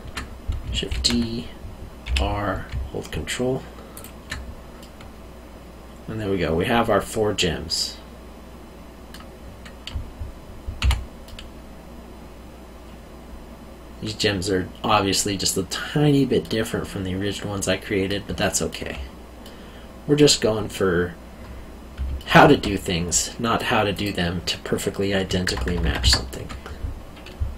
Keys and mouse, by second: 0.9 shift+d, 2.0 r, 3.9 ctrl+click, 4.8 middle click, 10.8 q, 11.2 middle click, 17.5 middle click, 18.4 alt+middle click, 19.4 middle click, 22.1 alt+middle click, 23.9 click.